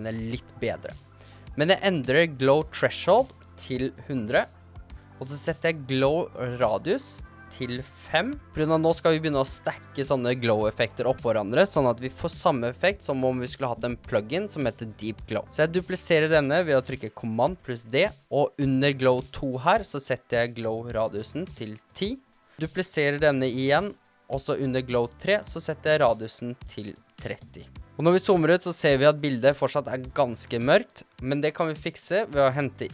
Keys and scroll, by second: 3.9-4.9 typing, 8.3 5, 17.8 super+d, 21.4 1, 21.7 0, 22.1 Return, 23.7 super+d, 26.9 3, 27.1 0, 27.6 Return.